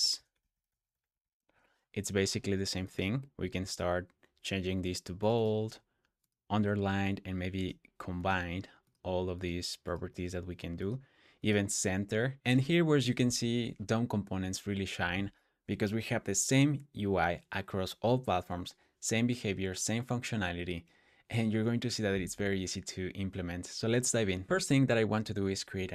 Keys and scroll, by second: 0.0-1.6 typing, 24.2-25.0 typing.